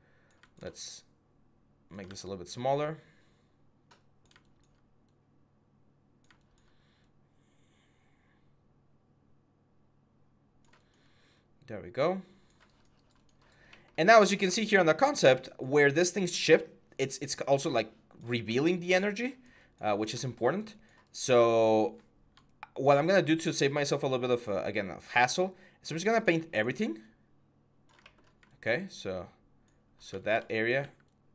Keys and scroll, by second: 1.8 ctrl+z, 30.6 x.